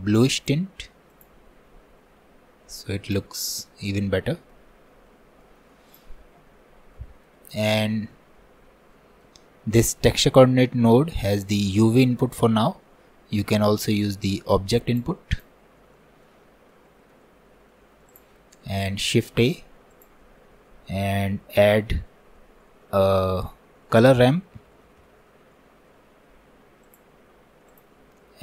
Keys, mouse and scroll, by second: 3.1 click, 3.3 scroll down 1, 3.6-5.2 middle drag, 5.2 scroll down 3, 5.4 middle click, 5.9-7.0 drag, 7.0-9.8 middle drag, 9.8 click, 10.7 scroll up 2, 11.2-14.3 middle drag, 14.3-15.5 drag, 15.8 scroll down 1, 16.0-17.5 middle drag, 17.5 scroll down 1, 17.7 middle click, 18.1-19.1 drag, 19.1 shift+a.